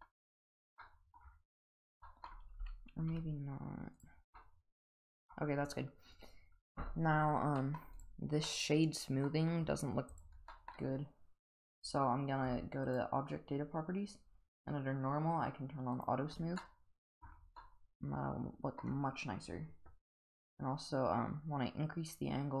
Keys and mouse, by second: 0.8-1.1 middle drag, 2.0 middle drag, 2.5 g, 4.4-5.3 middle drag, 7.6 middle drag, 8.5-9.3 middle drag, 10.5 middle drag, 14.5 click, 15.9 click, 16.6-17.2 middle drag, 17.6-18.8 middle drag, 20.5-22.6 drag.